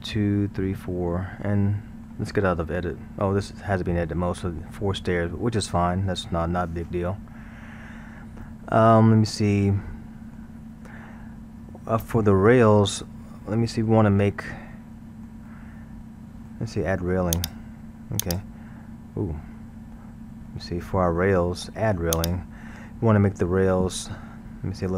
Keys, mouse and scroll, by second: 1.5-6.8 middle drag, 7.2-10.2 middle drag, 11.0-17.3 middle drag, 17.3 click, 18.2 click, 19.5-20.5 scroll, 20.5-22.1 middle drag, 22.1 click.